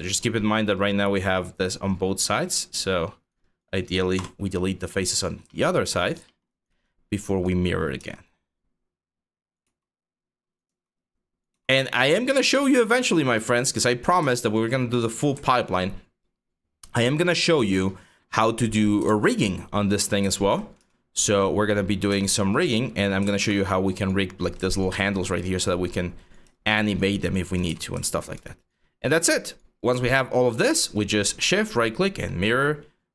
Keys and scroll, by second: 3.8 BackSpace, 5.6 5, 7.6 e, 9.3 w, 10.3 e, 11.1 w, 18.7 ctrl+z, 20.4 e, 21.7 w, 22.9 ctrl+z, 27.3 q.